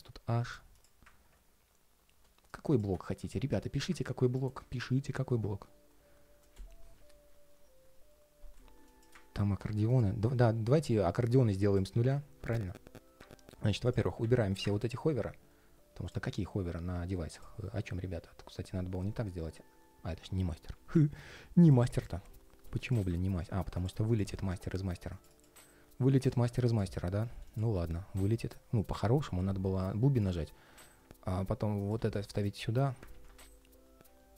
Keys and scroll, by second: 12.3 ctrl+shift+4, 32.8 super+z.